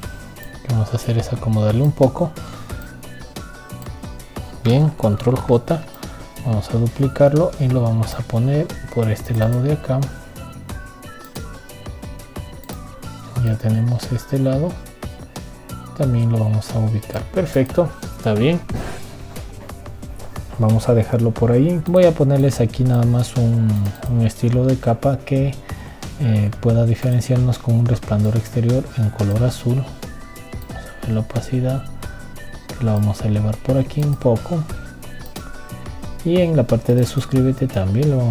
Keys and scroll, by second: 6.2 ctrl+j.